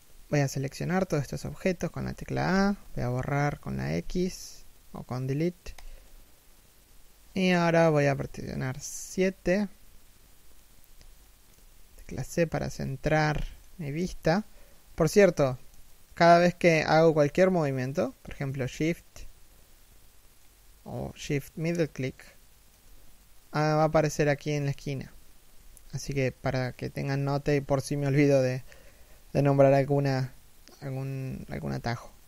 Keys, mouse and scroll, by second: 1.9 a, 7.8 KP_7, 10.5 shift+middle click, 11.2 c, 11.6 shift+middle click, 14.7 shift+middle click, 17.5 shift+middle click, 20.0 shift+middle click, 21.5 shift+middle click, 25.5 KP_1, 26.6 KP_7.